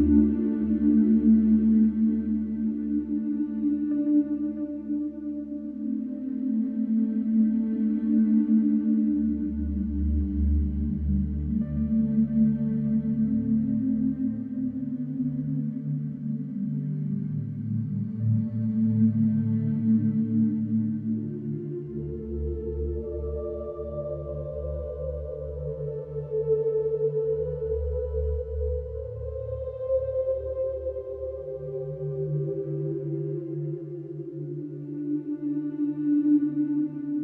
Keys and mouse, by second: 2.0 shift+middle click, 2.3-3.8 middle drag, 4.9 ctrl+l, 5.5 ctrl+z, 7.1 ctrl+l, 8.7 ctrl+z, 9.1 ctrl+z, 10.5 m, 10.6 t, 10.8 l, 11.1 Return, 15.5 middle click, 17.5 ctrl+l, 20.1 click, 20.1-20.6 typing, 20.7 Return, 23.4 shift+middle click, 23.9-24.3 middle drag, 26.2 shift+middle click, 28.3 Tab, 28.8 Return, 29.5 Tab, 30.6 s, 31.1 Escape, 31.6 shift+z.